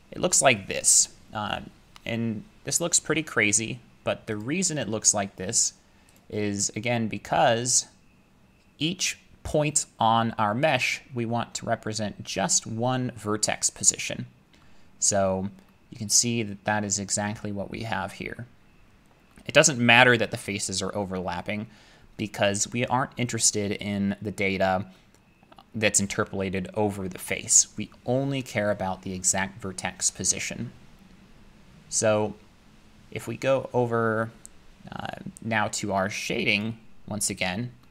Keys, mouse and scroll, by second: 4.4 click, 7.0-9.4 scroll, 9.5 scroll, 11.9 scroll, 12.9 scroll, 13.4-14.6 scroll, 14.6-16.2 scroll, 16.2-16.5 scroll, 16.9 scroll, 18.5 middle click, 18.9 middle click, 18.9-19.3 scroll, 19.6 middle click, 19.8 middle click, 19.9 scroll, 36.6 click.